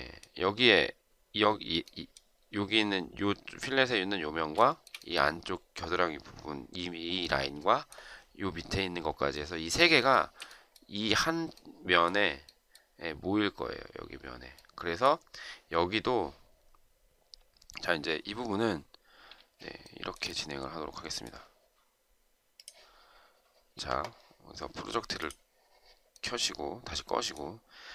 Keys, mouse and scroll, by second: 4.4 shift+right click, 9.9 shift+right click, 19.7 shift+right click.